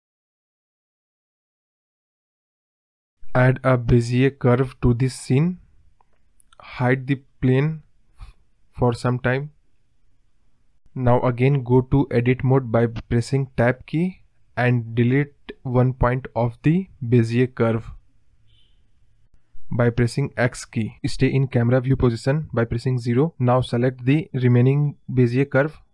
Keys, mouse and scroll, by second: 0.0 middle drag, 0.4-1.2 scroll up 2, 1.2-1.7 scroll down 1, 1.7-2.5 scroll up 1, 3.1-4.7 middle drag, 5.8 shift+a, 7.5-7.9 scroll up 5, 7.9-9.2 middle drag, 9.2 click, 9.5 scroll down 2, 9.7-11.0 middle drag, 11.0 scroll down 1, 11.0-12.2 middle drag, 12.2 KP_0, 13.5 Tab, 13.9-15.5 scroll up 1, 18.0 click, 18.2 click, 19.3 x, 20.8 click, 22.6 g.